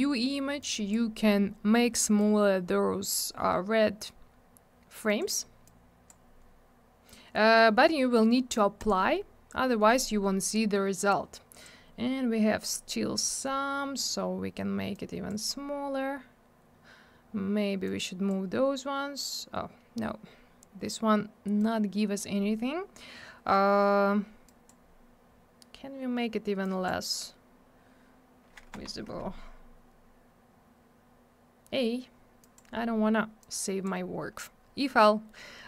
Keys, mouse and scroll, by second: 0.6 click, 2.1 click, 5.0 click, 5.2 click, 5.6 click, 8.7 click, 8.8 click, 11.1 click, 14.9 click, 17.8 click, 21.6 click, 24.4 click, 26.6 click, 28.7 Escape, 32.4 click, 32.5 click, 33.4 click.